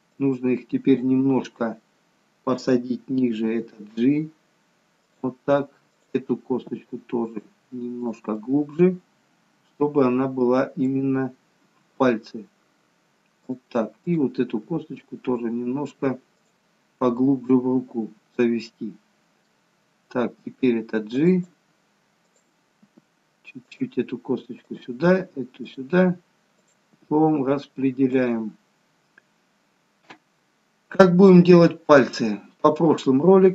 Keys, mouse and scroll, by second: 0.3 click, 3.7 g, 6.1 click, 8.4 middle click, 8.4 g, 14.1 click, 14.6 g, 17.1 middle click, 20.3 g, 22.4 click, 23.0 g, 24.8 click, 25.2 g, 26.8 click, 27.1 g, 30.4-31.1 scroll up 1, 31.3 shift+middle click, 32.4-33.5 scroll up 1.